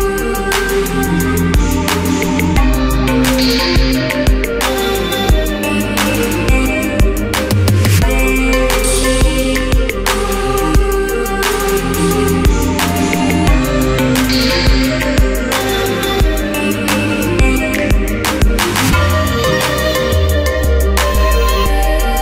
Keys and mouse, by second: 1.5 ctrl+s, 3.2 ctrl+s, 4.3 Tab, 4.7 alt+v, 5.4 q, 7.6 z, 8.6 alt+m, 11.2 q, 12.9 g, 14.5 a, 15.1 l, 15.8 middle click, 16.0 g, 16.4 middle click, 16.6 Tab, 17.0 middle click, 17.1 a, 17.5 middle click, 17.7 Tab, 17.9 a, 18.3 middle click, 18.4 l, 20.7 click, 20.7 l, 21.4 click, 22.1 Tab.